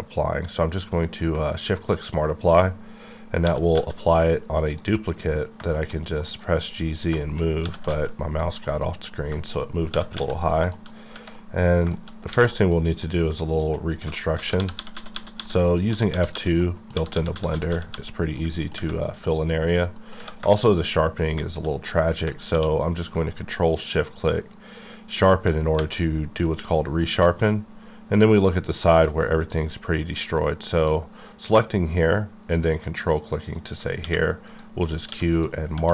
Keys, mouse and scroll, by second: 1.2 shift+q, 1.6 shift+click, 3.4 scroll down 1, 3.5 g, 3.7 z, 4.7 click, 5.2-7.0 scroll down 10, 5.7 shift+middle click, 6.2 KP_Decimal, 7.2 shift+middle click, 7.5 scroll up 1, 7.6 g, 7.9 z, 8.4 click, 8.6 click, 8.7 KP_Decimal, 9.0 scroll, 9.3 shift+scroll down 1, 9.3 shift+middle click, 9.6-9.9 shift+scroll up 2, 9.9 g, 10.2 z, 10.4 click, 10.6 shift+click, 10.7 shift+middle click, 11.0 scroll up 1, 11.3 middle click, 11.6-12.3 scroll up 3, 11.9 shift+middle click, 12.3 alt+shift+a, 12.5 middle click, 13.0 middle click, 13.2 shift+click, 14.0-17.9 typing, 15.5 middle click, 16.6 middle click, 18.4 middle click, 18.7 scroll down 1, 19.0 middle click, 19.9 middle click, 20.5 shift+middle click, 21.1-21.4 scroll down 2, 21.4 shift+middle click, 22.5 q, 25.3 ctrl+shift+Num_Lock, 25.3 click, 26.8 middle click, 28.6 scroll up 1, 28.8 middle click, 29.4-30.8 scroll up 1, 33.4 ctrl+click, 34.0 q, 34.5 click, 35.1 q, 35.3 click.